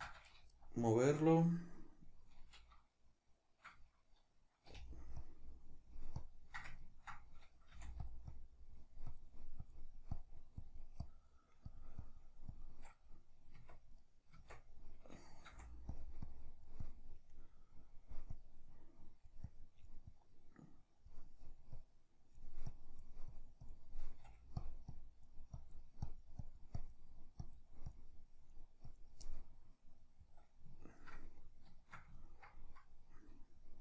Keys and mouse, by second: 6.9-8.1 ctrl+middle drag, 7.8 f, 8.3-14.1 drag, 13.6 Tab, 14.1 right click, 14.4 Tab, 15.5 f, 16.3-23.8 drag, 24.3 f, 25.0-28.1 drag, 28.3 click, 29.2-33.8 middle drag.